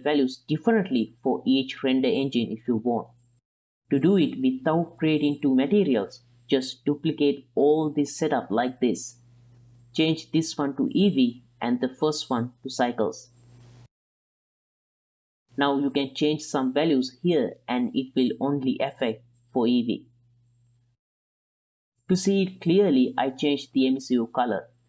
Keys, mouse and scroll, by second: 1.8-2.9 middle drag, 4.2-5.2 drag, 5.6-6.1 middle drag, 7.0 shift+d, 8.9 middle drag, 9.3 middle click, 10.1 middle click, 10.8-12.0 drag, 12.6 middle click, 13.1 middle click, 13.7-14.4 drag, 14.9 ctrl+middle click, 15.2 middle click, 15.3 ctrl+middle click, 15.4 right click, 16.1 right click, 16.4 right click, 16.7 right click, 16.9 middle click, 17.4 shift+right click, 18.2 right click, 19.3 right click, 20.0-20.7 middle drag, 20.8 middle drag, 22.0 middle click, 22.1 click, 22.9 click, 23.4 ctrl+z.